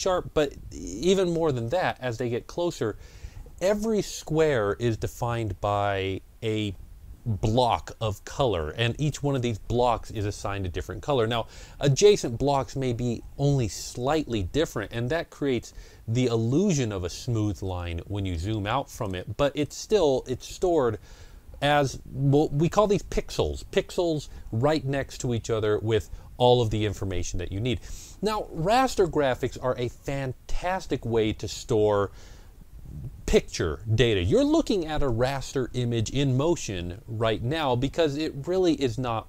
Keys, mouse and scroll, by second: 1.3 scroll down 1, 1.6 ctrl+scroll up 1, 14.8 ctrl+scroll up 1, 15.1 ctrl+scroll down 1, 15.6 ctrl+scroll down 1, 18.8 ctrl+scroll up 1.